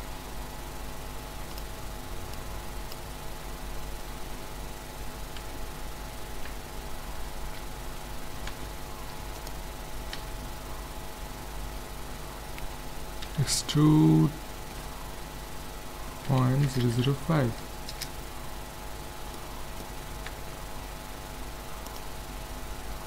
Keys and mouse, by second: 1.5-3.3 drag, 4.4 middle click, 5.4 Tab, 8.5 ctrl+Tab, 10.2 a, 13.3 e, 19.3-22.0 middle drag, 20.1 ctrl+Tab, 22.5 middle click.